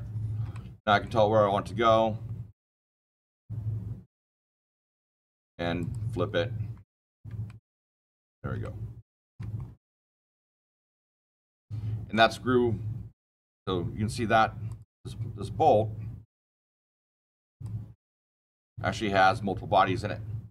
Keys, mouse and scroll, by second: 0.5 shift+middle click, 0.8 shift+middle click, 1.0 shift+middle click, 2.0 middle click, 2.1-3.2 scroll, 3.2 click, 5.7 click, 7.0 click, 7.4-7.9 shift+middle click, 7.7 shift+middle click, 8.0 scroll, 8.6-9.3 shift+middle click, 9.0 shift+middle click, 9.1 shift+middle click, 9.5-10.0 scroll down 10, 10.0 scroll, 10.4-12.0 shift+middle click, 10.8 shift+middle click, 14.6 click, 16.4 click, 17.4 click, 18.4 click, 20.4 click.